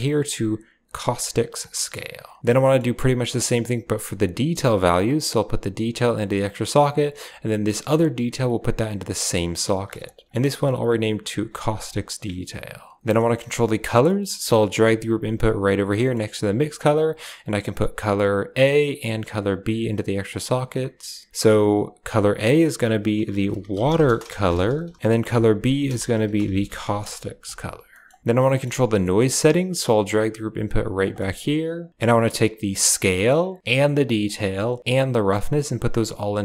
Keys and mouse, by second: 1.7 middle click, 2.5 middle drag, 3.2 click, 4.9-6.1 drag, 6.3 click, 8.0-9.2 drag, 9.8 click, 10.3 click, 10.6 click, 10.7-11.7 drag, 12.8 click, 13.1 middle click, 13.9 middle click, 14.5 click, 14.6 g, 15.8 middle click, 16.5 g, 17.5-18.5 drag, 19.0-20.0 drag, 20.2 click, 22.1-26.9 drag, 27.8 middle click, 28.3 middle click, 28.5 click, 28.5 right click, 28.9 middle click, 29.0 click, 29.0 right click, 29.6 g, 31.1 middle click, 32.8 drag, 32.9-33.6 drag, 34.1-34.8 drag, 34.9 click, 35.7-36.4 drag.